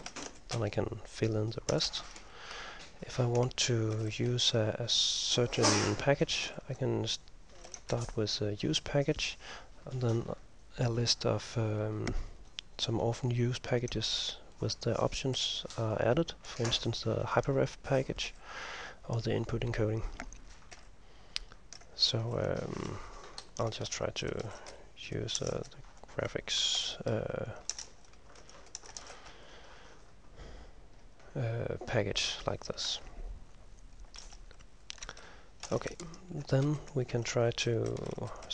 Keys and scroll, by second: 0.0-0.8 typing, 1.8 Return, 2.0 Return, 3.1 Up, 3.3-5.5 typing, 6.5 ctrl+m, 6.7-8.2 typing, 15.5 ctrl+m, 20.8 ctrl+m, 22.8-30.1 typing, 32.7 Home, 33.1 End, 34.3 Left, 35.0 Home, 35.0 Left, 35.7 End, 35.7 Return, 35.9 Return, 37.4-38.5 typing.